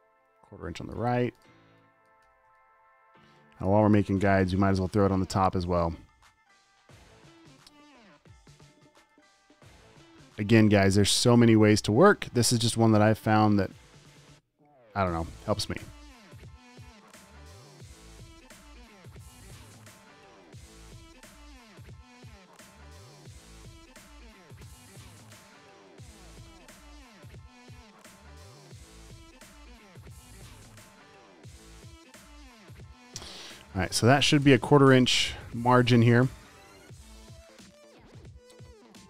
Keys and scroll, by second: 2.7 super+t, 4.9 super+a, 5.2 space, 5.6 space, 10.3 super+a, 13.1 super+z, 20.3 super+a, 21.3 super+z, 21.6 v, 22.4 super+z, 23.5 super+d, 23.6 v, 24.8 super+z, 28.1 shift+super+}, 28.4 super+a, 30.1 super+d, 30.6 v, 34.8 BackSpace, 37.4 space.